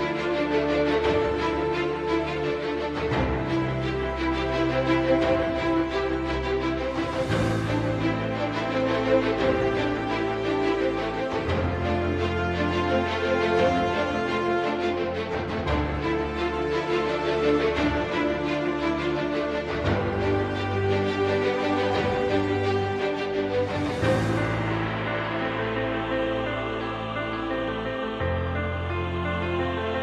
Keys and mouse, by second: 2.3 3, 3.0 middle click, 4.3 shift+middle click, 6.5 click, 21.8 e, 28.2 middle click, 29.3 KP_3.